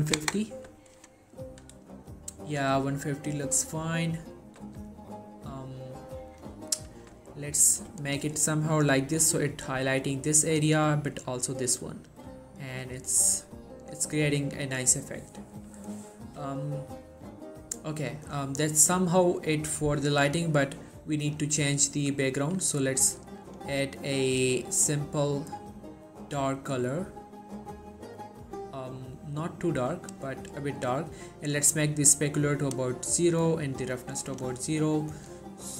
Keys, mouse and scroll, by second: 2.7 g, 3.6 right click, 4.7 g, 6.4 click, 19.6 scroll down 1, 20.4 click, 24.4 right click, 24.9-30.1 drag, 33.9-34.5 click.